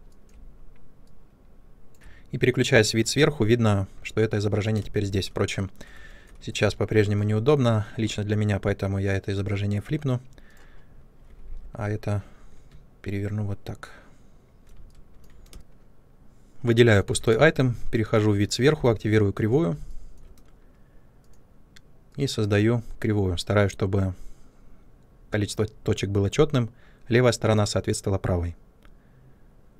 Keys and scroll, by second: 1.9 shift+a, 3.0 ctrl+space, 11.3 e, 15.4 space, 17.2 ctrl+space.